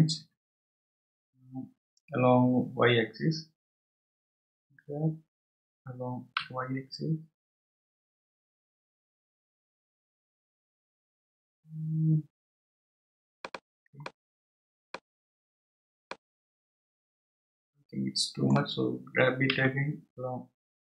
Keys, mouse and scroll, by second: 1.1 g, 14.0-15.3 middle drag, 15.3-15.6 scroll up 3, 16.0-19.2 middle drag, 19.5 g.